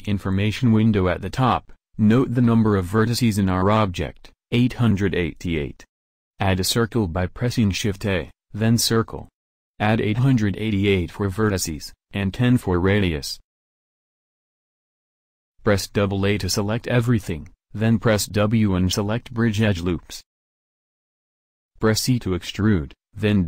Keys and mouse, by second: 6.8 shift+a, 8.8-9.9 drag, 9.9 8, 10.0 8, 15.4 a, 15.6 a, 17.1 w, 23.1 e.